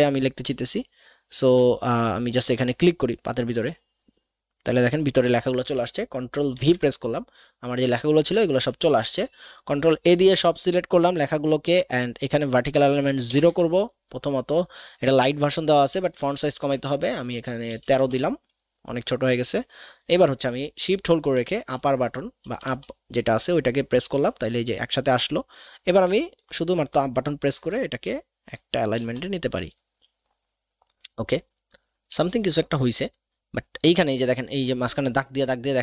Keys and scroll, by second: 6.5 ctrl+v, 8.8 ctrl+a, 13.4 KP_0, 13.5 Return, 16.3 ctrl+a, 17.7 KP_1, 17.8 KP_3, 18.1 Return, 21.3 shift+Up, 21.9 Up, 22.4 Down, 22.7 Down, 26.0 Up, 26.3 Up, 26.8 Up, 27.4 Up, 27.9 Up, 28.4 Up, 29.0 Down, 32.2 Down.